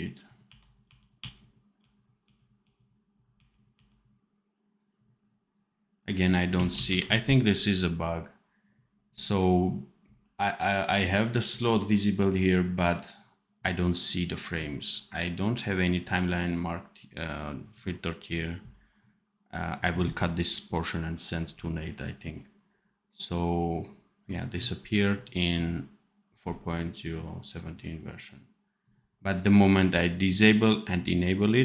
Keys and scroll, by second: 0.4-3.3 typing, 6.7 ctrl+s.